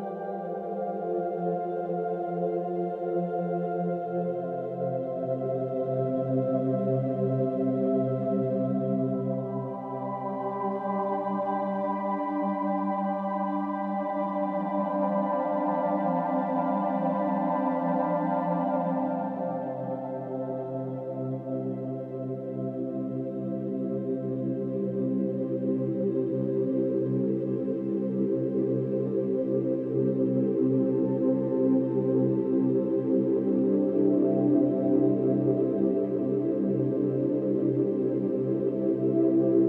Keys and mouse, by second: 2.9 ctrl+click, 4.5 ctrl+click, 5.8 ctrl+click, 7.1 ctrl+click, 7.3 ctrl+click, 8.5-9.5 drag, 9.6-10.6 shift+drag, 11.6 ctrl+g, 13.8-26.5 drag, 26.7-32.8 ctrl+drag, 34.8-39.6 drag.